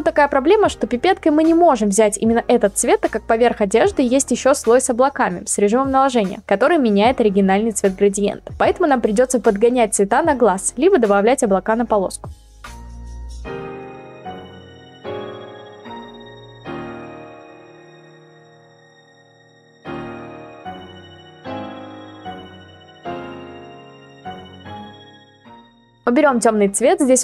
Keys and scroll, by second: 12.8 ctrl+t, 15.5 Return, 17.6 ctrl+t, 19.4 Return, 20.6 ctrl+t, 22.1 Return.